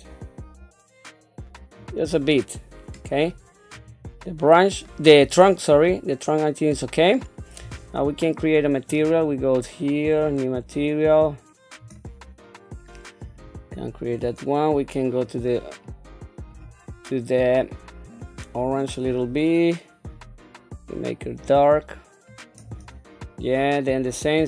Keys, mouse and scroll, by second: 2.3 middle click, 3.7 click, 4.2-7.7 middle drag, 8.8 click, 10.0 click, 13.2 click, 17.2 middle click, 19.0 click.